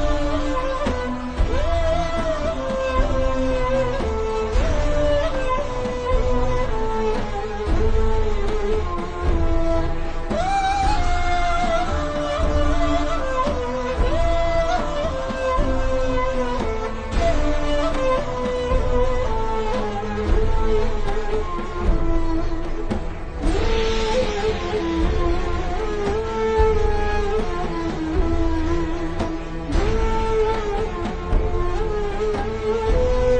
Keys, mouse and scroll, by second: 0.0 click, 4.2 KP_4, 4.5 KP_Enter, 5.6 click, 6.8 v, 7.0 click, 12.5 click, 16.6-16.9 alt+shift+scroll up 3, 16.9 click, 20.9 click, 21.9 alt+shift+scroll down 1, 22.7-23.0 alt+shift+scroll up 1, 23.7-24.5 scroll up 1, 24.5 n, 25.0 click, 26.1 z, 26.6 click, 29.5 click, 31.2 v, 31.8 click.